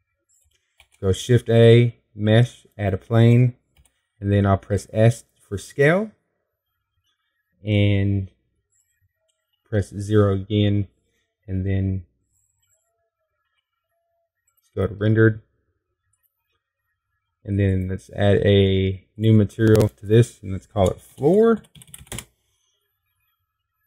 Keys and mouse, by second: 0.4-2.6 middle drag, 2.6 shift+a, 5.6 s, 9.9 middle click, 10.1 middle click, 11.2 KP_0, 15.3 z, 18.2-23.8 drag.